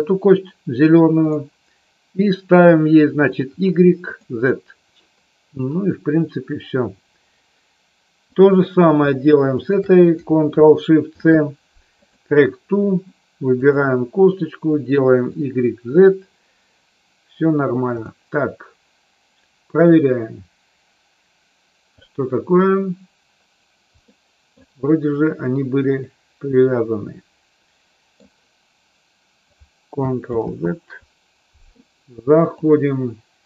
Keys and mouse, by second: 1.2 click, 3.2 click, 9.6 shift+click, 11.1 ctrl+shift+c, 13.6 click, 15.2 click, 15.8 click, 17.8 click, 19.8-22.1 drag, 23.9 middle click, 25.9-28.1 middle drag, 30.3 ctrl+z, 32.3-33.4 drag.